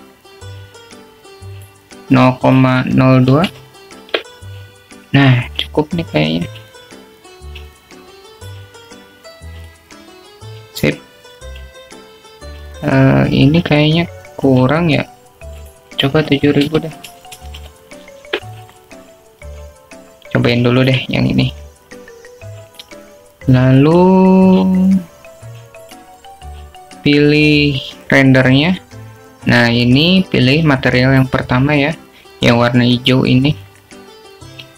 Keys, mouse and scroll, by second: 3.6-6.5 drag, 10.5 click, 11.7 click, 17.8-20.7 drag, 19.4 0, 22.8 alt+shift+middle click, 24.8 click, 26.1 click, 28.0 drag, 30.2 click, 33.2-34.7 drag.